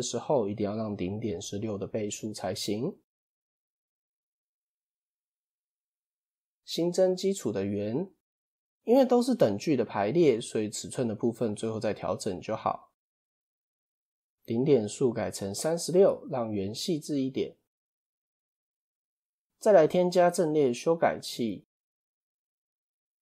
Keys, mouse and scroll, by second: 3.1 ctrl+z, 3.4 ctrl+z, 3.6 ctrl+z, 3.9 ctrl+z, 4.8 ctrl+z, 6.7 shift+a, 14.4-17.4 drag, 18.6-19.2 scroll up 1, 20.0 click.